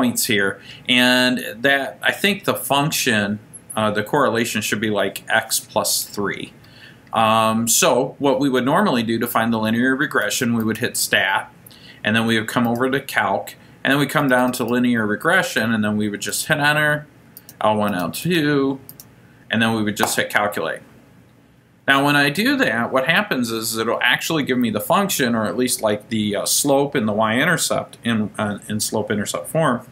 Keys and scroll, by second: 12.8 Right, 14.3 Down, 14.5 Down, 14.7 Down, 16.5 Return, 17.5 Return, 18.4 Return, 19.0 Return, 20.5 Return.